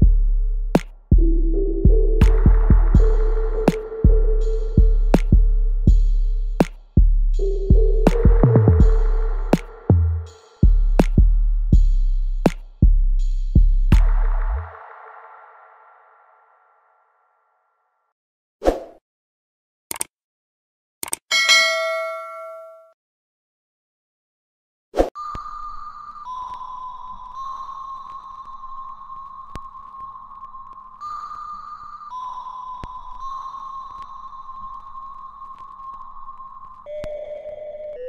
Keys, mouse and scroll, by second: 1.0 click, 1.8 alt+right click, 2.2 alt+middle click, 2.6-3.9 alt+drag, 3.9 alt+middle click, 4.2 alt+right click, 4.7 click, 4.7-6.1 alt+drag, 6.1 s, 6.6 click, 7.0 alt+right click, 7.7-10.1 alt+drag, 10.1 alt+middle click, 10.5-12.1 alt+right drag, 12.1 click, 16.4 click, 19.4 right click, 20.5 click, 23.0 alt+right click, 23.8-27.0 alt+drag, 27.0 alt+right click, 27.7 alt+middle click, 28.8 click, 30.5-38.0 ctrl+drag.